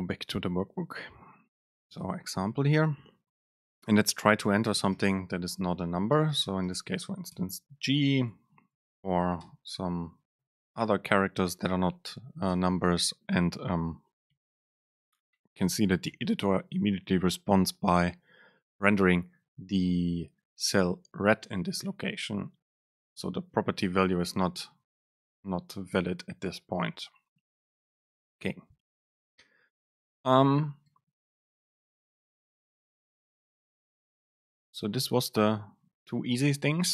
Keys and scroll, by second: 5.4 BackSpace, 22.9 BackSpace, 29.8 Down, 30.9 Up, 34.1 Down, 34.4 Up, 34.8 Down.